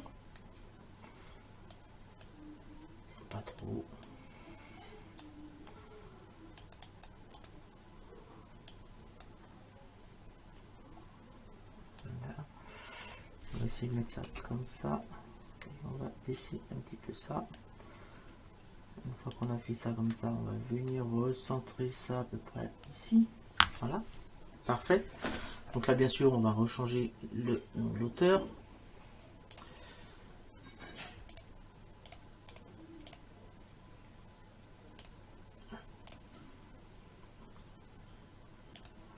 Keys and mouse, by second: 1.8 click, 3.6 click, 5.2 click, 6.6 click, 8.7 click, 12.0 click, 14.3 Return, 14.3 KP_Enter, 16.4 click, 19.3 click, 20.9 click, 29.5 click, 31.4 click, 35.0 click, 36.1 click, 38.8 click.